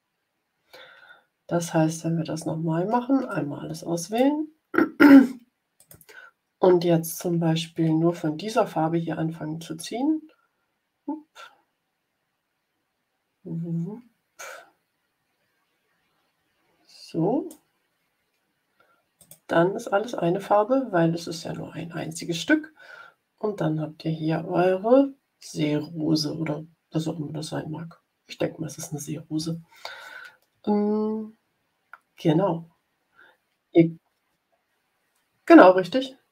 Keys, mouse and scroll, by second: 3.2-4.3 drag, 5.7 click, 9.7-17.6 drag, 19.1 click.